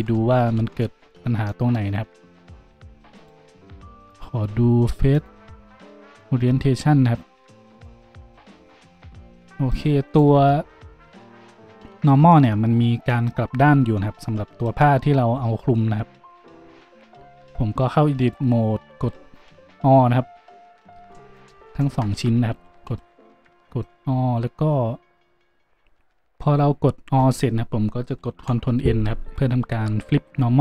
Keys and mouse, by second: 1.1 ctrl+z, 2.2 Tab, 2.6 Tab, 3.1 middle click, 8.9-12.1 drag, 10.0 middle click, 10.0 right click, 12.4-21.3 drag, 16.9 Tab, 19.0 a, 21.0 Tab, 21.3 middle click, 21.4 shift+click, 21.8 shift+middle click, 21.8-30.6 shift+drag, 22.1 Tab, 22.5 a, 22.8 a.